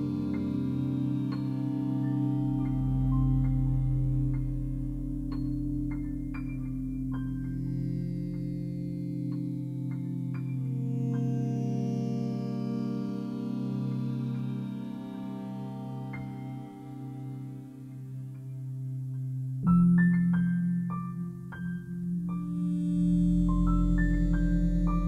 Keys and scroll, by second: 7.4 2, 8.8 Return.